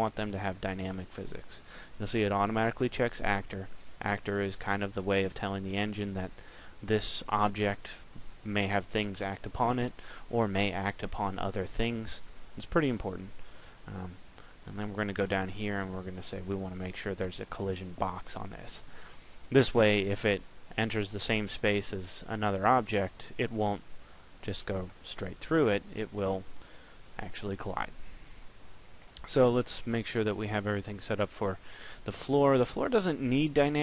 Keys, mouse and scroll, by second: 16.0 click, 28.8 right click.